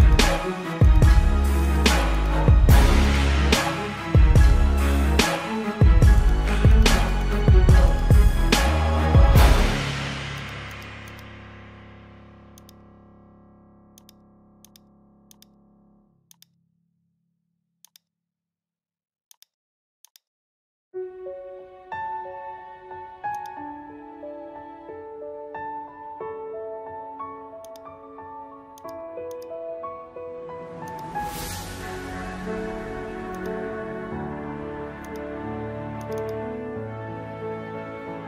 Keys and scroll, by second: 0.2 space, 0.8 ctrl+alt+z, 2.9 ctrl+-, 3.1 space, 3.8 space, 6.2 ctrl+alt+z, 11.3 space, 12.9 space, 22.4 space, 23.4 space, 23.9 space, 24.6 ctrl+alt+z, 30.0 space, 34.5 space, 35.9 space.